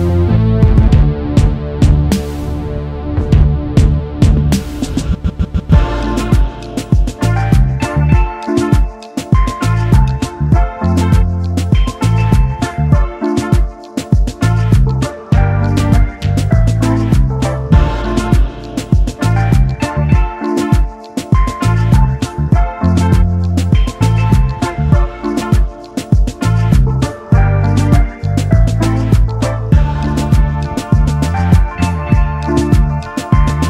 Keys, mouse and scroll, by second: 1.2 ctrl+x, 2.1 alt+scroll up 1, 5.7 shift+click, 6.8 shift+click, 7.9 alt+scroll down 1, 9.0 alt+scroll down 1, 9.8 ctrl+g, 10.4 space, 12.1 double click, 13.9 ctrl+f, 18.9 alt+scroll up 1, 20.4 double click, 23.2 space, 23.3 double click, 25.3 typing, 26.1 alt+scroll up 1, 33.0 double click.